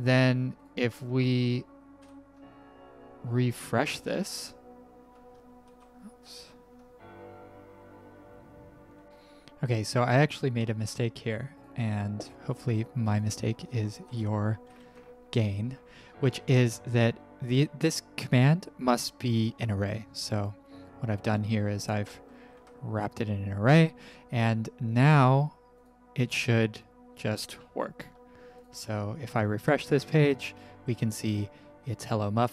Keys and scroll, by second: 1.9 ctrl+r, 5.6 ctrl+r, 9.4 Print, 9.4 ctrl+`, 14.6 w, 14.8 w, 22.0 b, 27.6 alt+Escape, 29.6 ctrl+r, 29.6 alt+Escape.